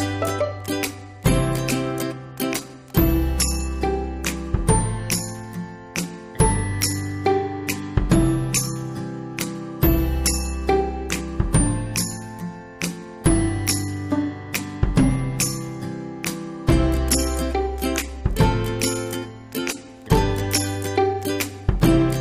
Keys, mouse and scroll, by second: 2.4 click, 5.3-10.1 middle drag, 10.1 click, 10.9 right click, 11.8 click, 17.4 click, 19.3-19.9 ctrl+scroll up 1, 20.5-22.2 middle drag.